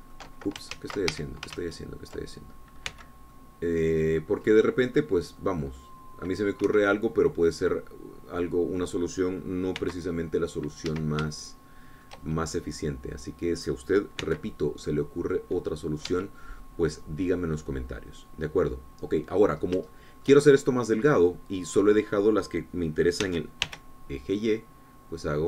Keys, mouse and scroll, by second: 0.0-1.7 drag, 2.2 ctrl+z, 2.5 ctrl+Escape, 3.0 ctrl+z, 4.3 c, 4.8-6.0 drag, 6.8-8.1 drag, 8.1 Escape, 8.4-10.9 drag, 11.2 c, 12.0 click, 12.3 Escape, 12.7-15.3 shift+drag, 15.7 c, 16.3-17.7 drag, 17.5 Escape, 17.9-18.5 scroll down 1, 18.5-21.2 drag, 21.4 shift+click, 24.7 s, 25.1 y.